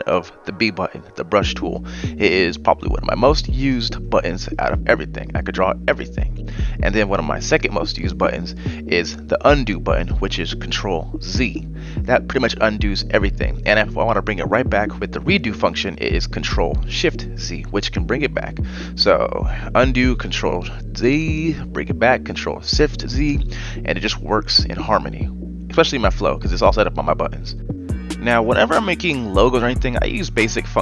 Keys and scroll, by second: 9.8 ctrl+z, 20.5 ctrl+shift+z, 21.9 ctrl+shift+z, 26.3 Delete, 28.8 v, 30.0 m.